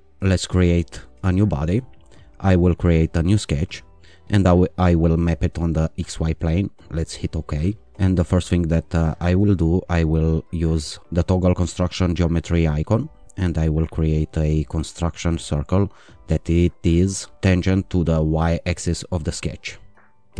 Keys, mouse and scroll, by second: 0.5 click, 2.7 click, 5.1 click, 6.8 click, 9.2 click, 14.3 click, 18.4 click.